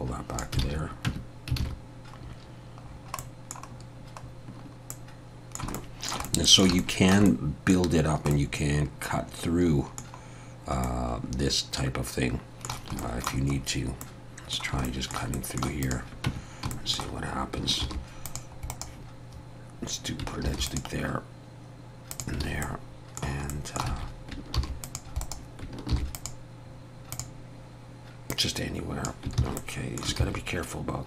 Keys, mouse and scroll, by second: 0.6 alt+a, 1.1 Tab, 1.6 alt+a, 2.2-2.6 scroll up 2, 2.9-3.2 scroll down 2, 3.2 middle click, 3.8-4.6 scroll down 3, 4.9 middle click, 5.7 shift+middle click, 6.3 middle click, 6.8 middle click, 7.3 middle click, 8.0 scroll down 1, 8.3 middle click, 10.9 middle click, 13.0 shift+middle click, 13.1 shift+middle click, 13.5-14.1 scroll up 3, 14.1 middle click, 14.8 shift+middle click, 15.4 middle click, 15.9 click, 16.3 Tab, 16.7 shift+middle click, 17.8 ctrl+r, 20.5 ctrl+r, 22.6 middle click, 23.5 middle click, 23.9 alt+a, 24.6 ctrl+r, 25.9 ctrl+r, 28.3 click, 29.4 ctrl+z, 29.6 middle click, 30.2 ctrl+z.